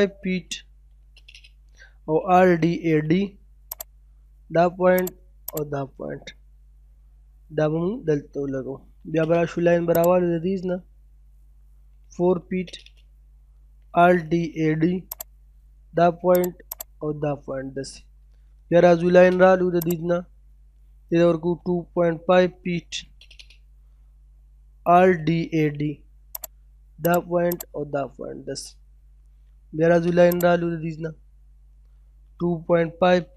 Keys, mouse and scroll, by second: 0.6 space, 1.7-2.5 typing, 3.7 click, 5.8 scroll down 1, 6.1 middle click, 7.0 scroll down 1, 7.2 middle click, 7.6 scroll up 1, 7.8 middle click, 8.5 l, 8.7 space, 8.9-9.9 scroll up 1, 9.9 click, 11.4-12.1 typing, 13.3-14.2 typing, 15.1 click, 17.1 scroll down 1, 17.3 middle click, 17.7 scroll up 1, 18.6 l, 18.8 space, 19.8 click, 20.9 typing, 22.7 space, 24.6-25.7 typing, 26.4 click, 27.9 scroll down 1, 28.1 middle click, 28.4 scroll up 1, 29.4 l, 29.5 space, 30.3 click, 31.7 typing.